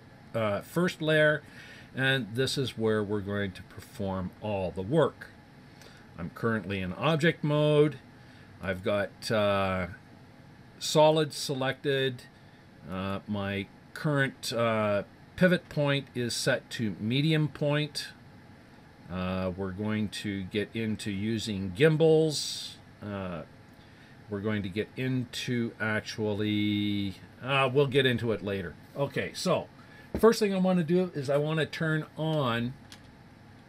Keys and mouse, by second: 8.6-9.7 drag, 10.3 click, 12.9 click, 32.3-33.6 middle drag.